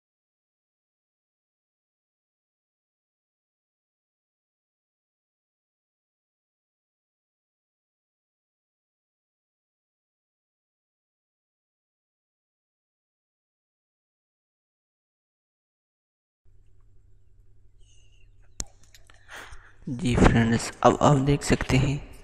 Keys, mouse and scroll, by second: 6.7-9.0 drag, 9.0-13.5 drag, 13.6-20.3 drag.